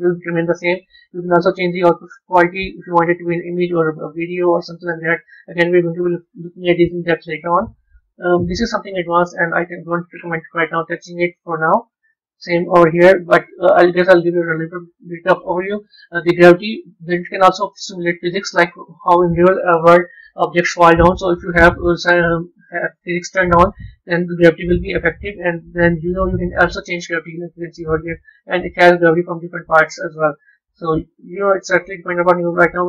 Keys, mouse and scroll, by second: 1.8-2.4 scroll down 2, 2.4-3.3 scroll down 2, 4.1-4.9 scroll down 6, 4.9-7.6 scroll up 12, 7.6 click, 11.8 click, 24.6-28.8 drag, 31.0-31.6 drag, 32.0 click.